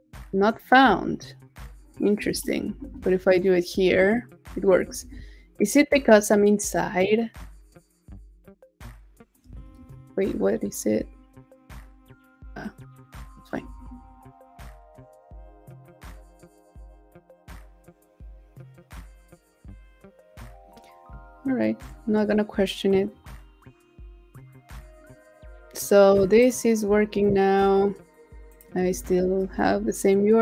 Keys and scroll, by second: 2.4 super+t, 2.7 super+v, 4.9 super+w, 9.7 super+t, 9.9 super+v, 13.6 super+w, 28.9 super+a, 29.2 super+v.